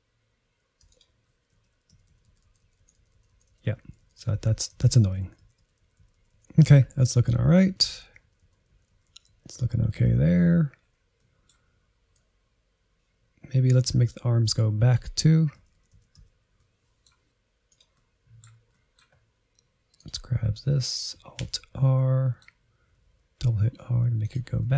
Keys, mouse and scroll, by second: 0.8 r, 1.6 Right, 2.0 Left, 2.2-4.1 Left, 4.2 Left, 4.4 Left, 4.6 Left, 4.8-5.3 Right, 5.5 Left, 5.6 Left, 5.9 Right, 6.0-7.6 Right, 7.7 Right, 7.9 Right, 8.1 Right, 8.3 Right, 8.5 Right, 8.7 Right, 9.0 Right, 9.2 Right, 9.3 Right, 9.6 Right, 10.0 Right, 10.2 Right, 10.5 Left, 11.2 middle click, 11.8-13.0 drag, 13.0 Right, 13.3 middle click, 14.0-16.8 typing, 14.6 middle click, 15.2 middle click, 16.2 shift+middle click, 17.9-19.1 middle drag, 19.1-20.0 scroll up 1, 20.0-21.5 drag, 21.5 alt+r, 21.8-22.8 middle drag, 22.8 r, 24.6 middle click.